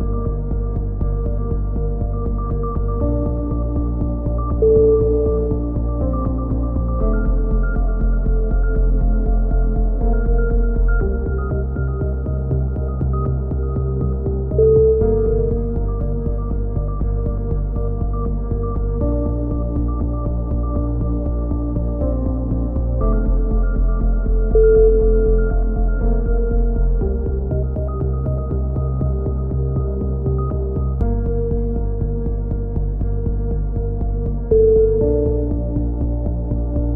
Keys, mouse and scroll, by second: 0.0 right click, 1.0 click, 1.6 shift+q, 1.8 a, 3.0 x, 4.4 middle click, 4.9 click, 5.1-6.4 right drag, 6.6 f, 6.8 a, 7.3-8.4 right drag, 8.2 f, 8.4 middle click, 8.4 a, 8.7 click, 8.8 middle click, 9.0 click, 11.0-12.5 middle drag, 16.1-19.3 middle drag, 19.3 KP_3, 19.6 z, 21.5-23.6 drag, 23.8 middle click, 24.5 c, 24.9 middle click, 25.1 right click, 25.6 click, 26.5-27.8 middle drag, 27.8 a, 28.1 z, 28.5 Tab, 29.2 z, 29.5 z, 29.9 Tab, 31.9-32.9 drag, 32.5 right click, 32.9 right click, 33.3 KP_3, 33.8 click.